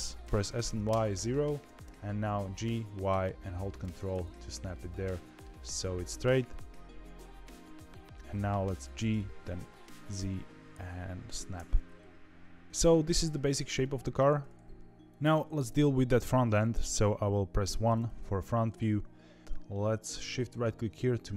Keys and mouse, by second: 0.2 s, 1.6 g, 4.6 middle click, 6.1-7.7 middle drag, 8.1 g, 11.6-12.6 middle drag, 13.3 middle click, 13.7 shift+middle click, 17.6 KP_1, 18.4 shift+middle click.